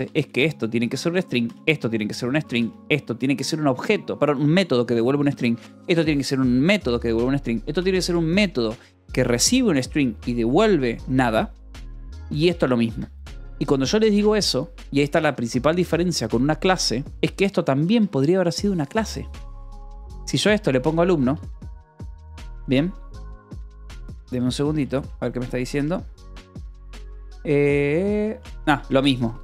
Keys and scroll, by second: 0.5 shift+v, 0.9 Escape, 1.1 j, 1.9 v, 2.0 Escape, 2.9 shift+v, 5.1 Escape, 5.5 j, 6.2 shift+v, 7.2 Escape, 7.5 j, 8.2 shift+v, 11.5 Escape, 11.9 j, 12.7 Escape, 13.3 k, 14.7 l, 17.0-21.8 typing, 22.6 ctrl+s, 23.0 j, 23.8 j, 24.8 d, 25.4 j, 26.1 space, 26.3 d, 28.3-29.4 typing.